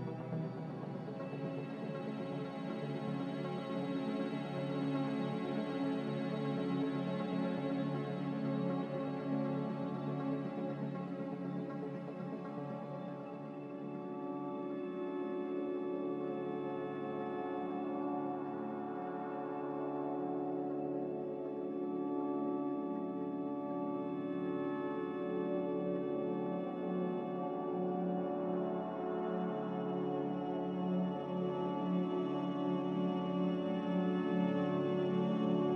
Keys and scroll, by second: 3.9 z, 14.3 g, 18.8-20.0 typing, 22.7 z, 27.2 a, 28.2 ctrl+c, 31.3 ctrl+v, 31.5-32.3 typing, 33.3 ctrl+c.